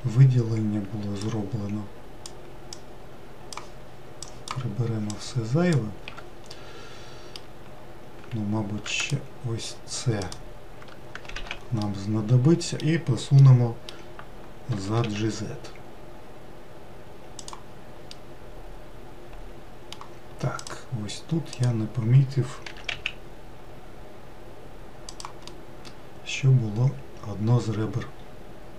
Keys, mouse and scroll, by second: 0.3 alt+z, 1.9 ctrl+click, 3.4 ctrl+click, 4.9 ctrl+click, 5.8 ctrl+click, 7.2-9.7 middle drag, 9.7 shift+click, 10.9 shift+click, 12.0 alt+z, 12.5-15.4 middle drag, 15.4 g, 18.8-21.3 middle drag, 21.3 click, 22.2 click, 23.4 g, 26.2-28.7 middle drag.